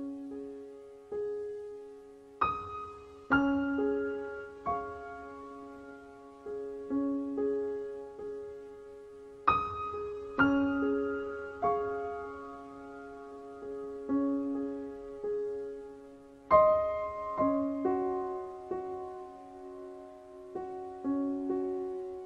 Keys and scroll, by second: 1.1 KP_4, 1.2 KP_5.